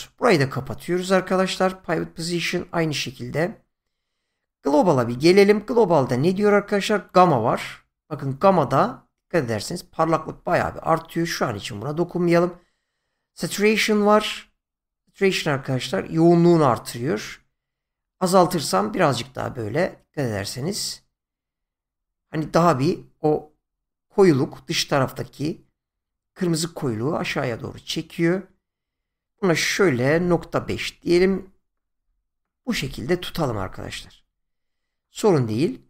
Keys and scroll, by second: 10.3 ctrl+z, 29.8-30.7 typing.